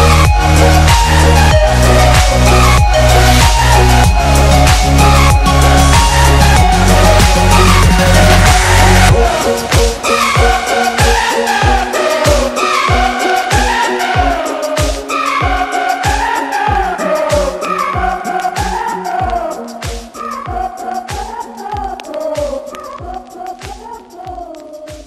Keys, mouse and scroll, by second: 2.4 ctrl+-, 3.9 space, 4.1 click, 4.3 space, 4.5 click, 4.6 space, 4.9 click, 5.1 space, 6.3 ctrl+-, 6.5 space, 6.7 click, 6.8 space, 7.1 click, 7.3 space, 9.0-9.5 space, 9.8 click, 9.9 space, 10.3 ctrl+=, 10.7 space, 10.8 click, 11.0 space, 11.6 click, 12.1 space, 12.4 click, 12.9-13.2 space, 13.8-14.3 drag.